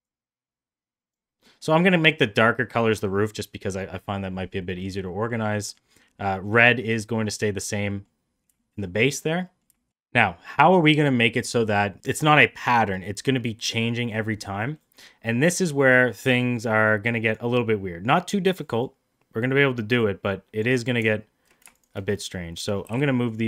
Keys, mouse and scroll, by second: 1.4 middle drag, 1.9 middle click, 2.6 middle drag, 4.6 middle click, 5.1 middle click, 5.5 middle click, 6.0 middle drag, 6.4 middle drag, 7.2-7.6 middle drag, 7.9 middle click, 8.6 shift+middle drag, 8.8-9.2 middle drag, 9.4 middle click, 9.7 shift+middle click, 12.0 middle drag, 14.9 middle click, 15.5 middle click, 16.7-17.4 drag, 18.9-20.6 drag, 21.8 shift+click, 22.9 g.